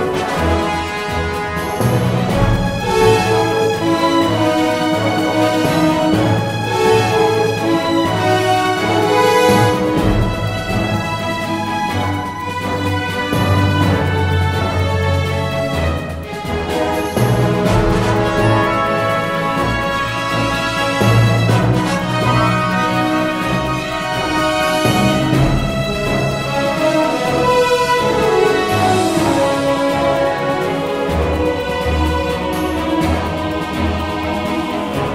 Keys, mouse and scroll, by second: 0.0-2.2 drag, 2.8 f, 5.7 f, 9.6 f, 13.9 f, 17.6 f, 21.8 f, 24.9 f, 27.4 f, 28.1 click, 28.9 Tab, 32.0 middle click, 32.4-33.8 drag.